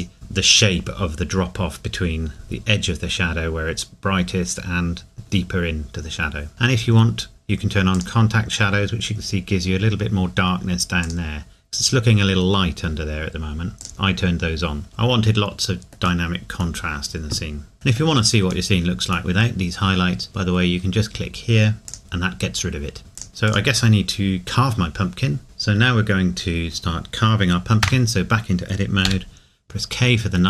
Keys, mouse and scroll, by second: 6.5 click, 7.9 click, 11.0 click, 13.8 click, 14.9 middle click, 17.7 ctrl+s, 18.7 middle click, 21.9 middle click, 23.3 middle click, 23.5 click, 25.4 Tab, 27.8 Tab, 29.1 k.